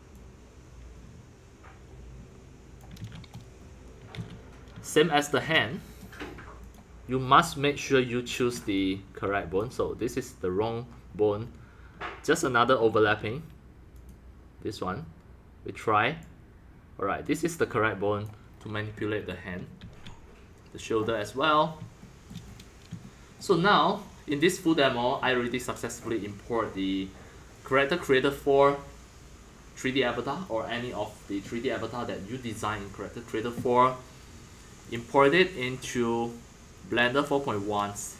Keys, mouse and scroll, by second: 2.7 drag, 3.0 ctrl+z, 3.3-4.1 middle drag, 4.1 ctrl+z, 4.9-6.6 shift+middle drag, 6.7-9.9 drag, 9.9-11.4 middle drag, 12.4 middle click, 12.5-12.9 middle drag, 12.9 drag, 13.0 ctrl+z, 14.0-18.5 drag, 18.5 middle click, 18.5-19.0 scroll up 3, 19.8 ctrl+z, 21.0-27.3 middle drag, 27.7-32.7 drag, 34.8-37.5 drag, 37.5 scroll up 3, 37.8-38.1 middle drag.